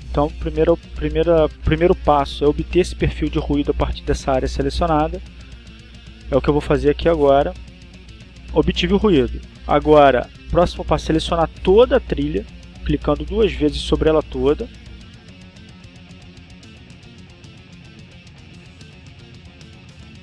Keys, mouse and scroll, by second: 10.4 click, 13.6 click, 16.6 click.